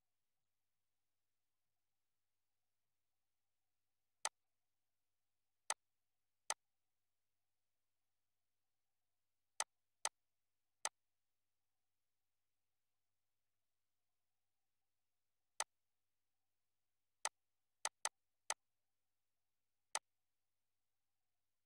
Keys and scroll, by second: 0.3 Up, 13.4 ctrl+z.